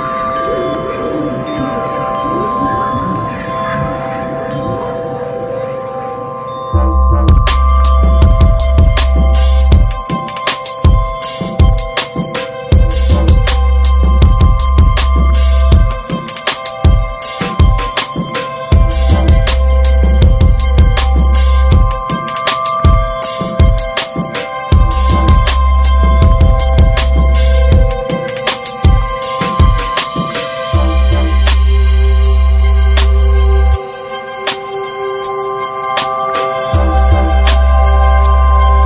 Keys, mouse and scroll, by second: 0.5 click, 1.6 alt+middle click, 2.3 scroll down 4, 2.6-3.2 shift+middle drag, 3.2 click, 4.6 Tab, 5.1 Tab, 5.4 `, 6.2 s, 7.4-9.3 drag, 9.3-10.4 right drag, 10.4 alt+middle drag, 11.8 s, 13.3 click, 14.7-15.6 drag, 16.4 middle click, 16.6 scroll down 5, 17.1 ctrl+s, 17.3 alt+z, 17.9 ctrl+s, 18.0 click, 18.3 middle click, 18.4 scroll up 1, 18.5 ctrl+s, 18.8 click, 19.9-22.4 drag, 22.4 scroll down 2, 22.7 middle click, 23.7-29.4 drag, 29.9 ctrl+s, 30.0 drag, 30.5 click, 31.5 middle click, 31.9 ctrl+s, 32.0 ctrl+s, 32.4 shift+middle drag, 32.6 scroll up 2, 32.9 ctrl+s, 33.9-36.8 drag, 37.0 ctrl+s, 37.3 click, 38.6-38.8 drag.